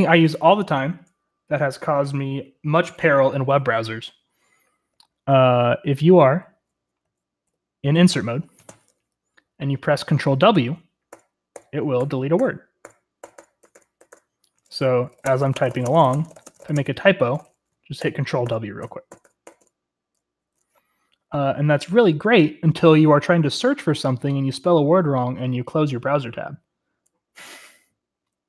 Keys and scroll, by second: 5.0-9.2 typing, 11.1 ctrl+w, 11.5 ctrl+w, 12.0 ctrl+w, 12.4 ctrl+w, 12.8 ctrl+w, 13.1-19.2 typing, 14.0 ctrl+w, 14.1 ctrl+w, 18.8-19.4 ctrl+w, 19.6 ctrl+w.